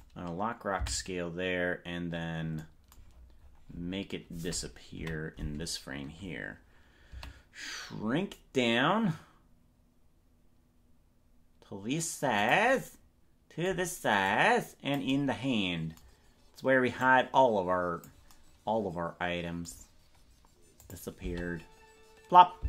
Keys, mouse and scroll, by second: 0.9 Right, 3.1-4.1 scroll down 14, 5.0 KP_Decimal, 7.2 s, 14.2 click, 17.0-18.1 drag, 20.9 click, 21.4 space.